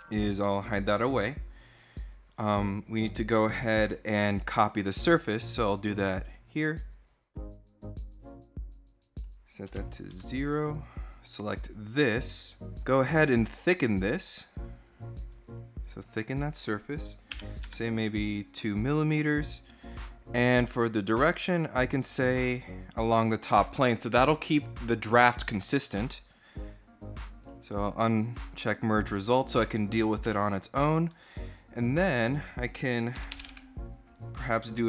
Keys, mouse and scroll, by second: 0.1 middle click, 0.7-1.2 scroll up 4, 1.4 scroll down 2, 5.7 click, 7.2 click, 8.8 click, 9.9 Return, 11.7 click, 14.0 click, 15.0 click, 17.4 Tab, 18.7 click, 19.5 click, 20.8 click, 21.8 click, 27.1 click, 27.9 click, 31.9 click, 32.7-33.8 typing, 34.3 click.